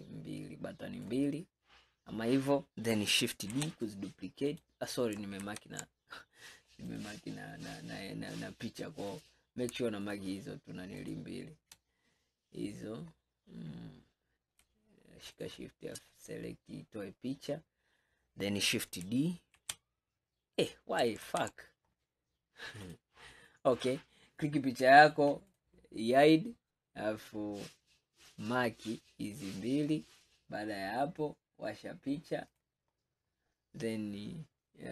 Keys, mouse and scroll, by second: 3.6 shift+d, 5.5 ctrl+z, 6.9 click, 9.2 click, 10.1 shift+click, 11.1 shift+click, 12.7-13.2 scroll up 1, 13.2-14.1 scroll down 8, 14.1-15.4 scroll up 3, 15.4 shift+click, 16.8-19.0 scroll up 5, 19.0-19.6 scroll up 1, 19.6 shift+d, 21.4 ctrl+z, 22.0-22.9 scroll down 4, 22.9 click, 23.8 click, 25.5 click, 26.1 scroll up 2, 27.5-28.4 scroll up 3, 28.4 click, 32.6 click, 33.0-33.9 scroll down 5, 33.9-34.3 scroll up 4.